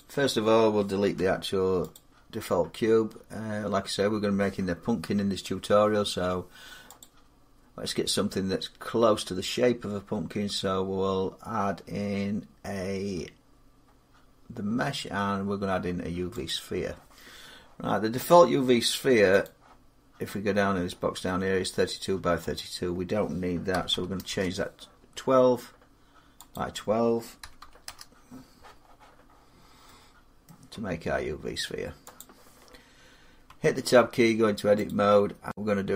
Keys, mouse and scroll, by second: 0.9 x, 1.7 click, 6.8 click, 16.3 click, 19.2 click, 22.3 click, 23.5 typing, 24.1 Return, 25.6 typing, 26.3 click, 27.2 typing, 27.6 Return, 29.3 middle click, 29.5 middle click, 30.3 middle click, 30.6 scroll, 33.3 Tab, 34.7 click.